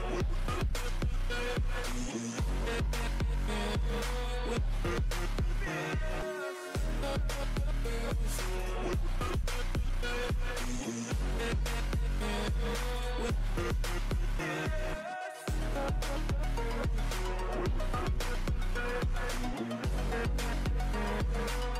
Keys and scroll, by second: 6.2 ctrl+t, 8.9 ctrl+t, 20.5 ctrl+t, 21.2 Delete.